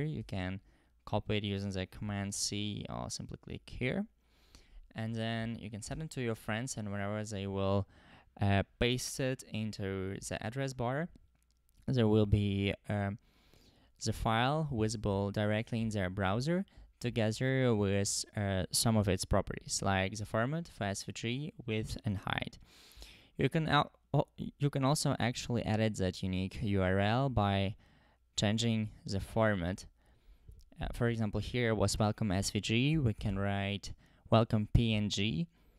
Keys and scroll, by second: 0.2 super+c, 2.1 super+c, 5.4 super+v, 5.9 Return, 29.7 BackSpace, 32.9-33.2 typing, 34.5 Return.